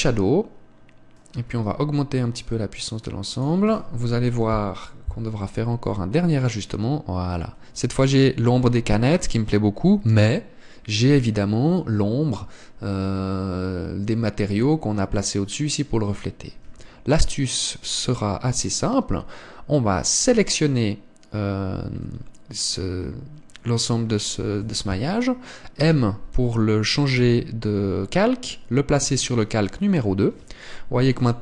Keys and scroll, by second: 17.7 Escape.